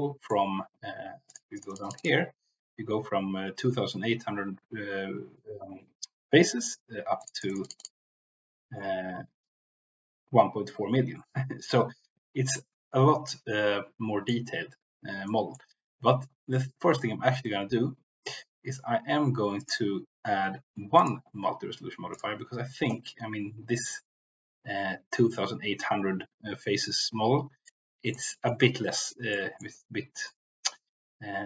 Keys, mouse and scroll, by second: 1.2 click, 7.2-8.4 drag, 13.2-14.3 middle drag, 15.2 middle click, 21.0-22.1 drag, 27.5-28.1 middle drag, 28.4-29.0 middle drag, 29.2 middle click, 30.2-31.4 middle drag.